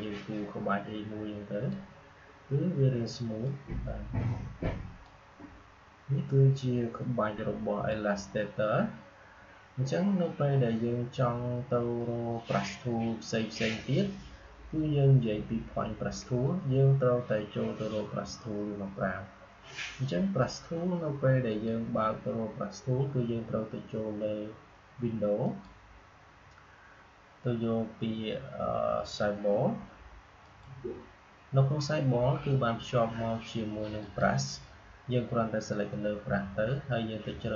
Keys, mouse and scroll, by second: 21.4 click, 25.3 click, 30.3 click, 33.9 click.